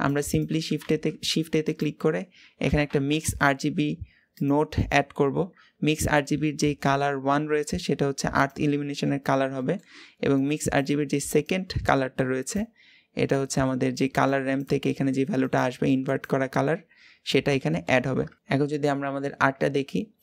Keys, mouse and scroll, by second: 7.4-19.1 drag.